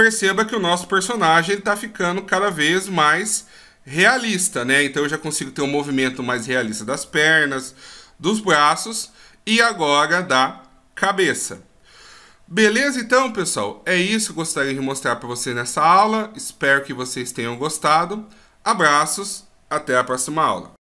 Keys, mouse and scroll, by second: 1.0-2.2 shift+scroll down 7, 2.2 scroll down 1, 3.0 shift+scroll down 1, 3.5 scroll up 1, 4.6 middle click, 9.1 middle click.